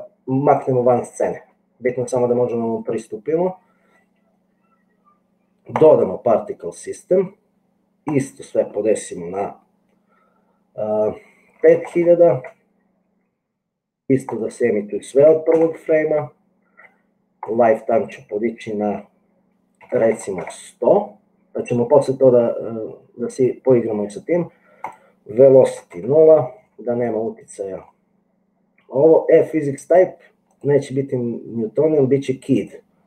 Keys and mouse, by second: 5.8 click, 8.3-13.3 drag, 11.9 KP_0, 14.4-16.4 drag, 17.5-21.6 drag, 20.3 KP_0, 24.8-26.5 drag, 30.6-33.0 drag.